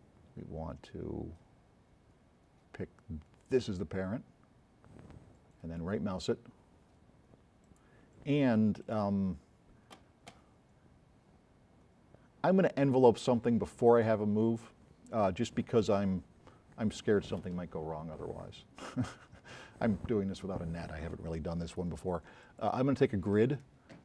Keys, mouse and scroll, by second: 3.5 middle click, 5.7 right click.